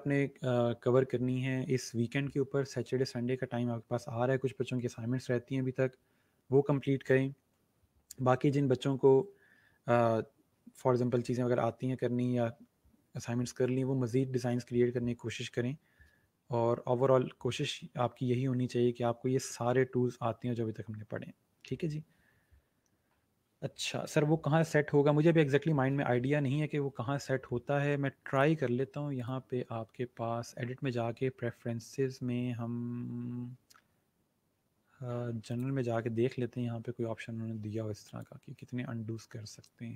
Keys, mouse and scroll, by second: 19.8-20.7 scroll down 1, 20.7-21.9 scroll up 1, 22.6 scroll down 1, 26.6 scroll up 1, 28.2 click, 35.4 click, 38.0 click.